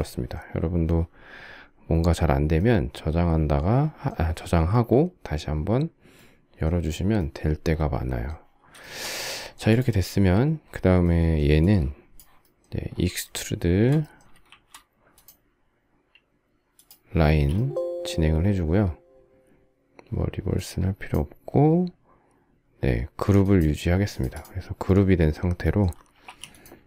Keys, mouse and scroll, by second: 8.5 shift+middle click, 14.2 shift+e, 16.9 space, 26.0 m.